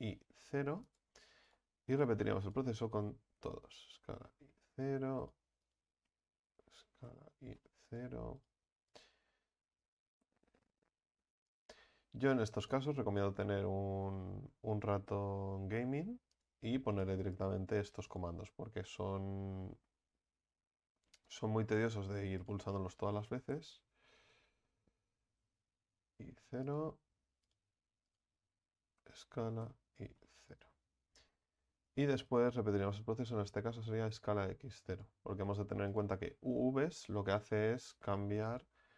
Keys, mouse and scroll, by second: 1.5 right click, 3.4 s, 5.2 right click, 6.6 s, 8.4-9.8 right drag, 9.8 s, 12.3 right click, 14.2 s, 16.9 right click, 19.0 s, 21.9 right click, 23.3 s, 27.5-29.0 right drag, 29.0 s, 31.5-34.0 right drag, 34.0 s, 35.5 right click, 36.9 s.